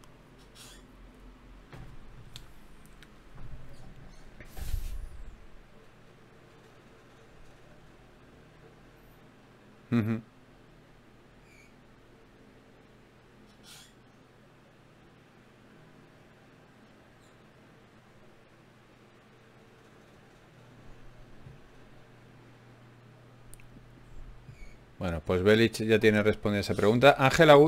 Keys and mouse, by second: 7.8-9.7 drag, 11.7-13.5 drag, 11.7-13.5 right drag, 15.5 middle click, 16.5-20.0 drag, 27.1 ctrl+Tab.